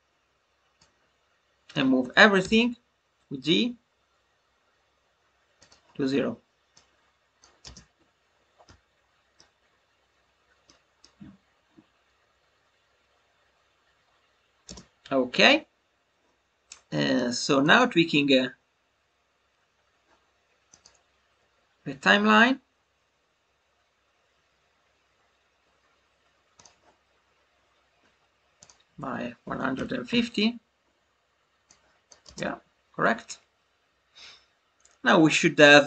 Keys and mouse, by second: 5.5-14.2 drag, 17.1 click, 17.3 space, 20.7-26.5 drag, 28.5-30.8 drag, 31.6 click, 32.7 space.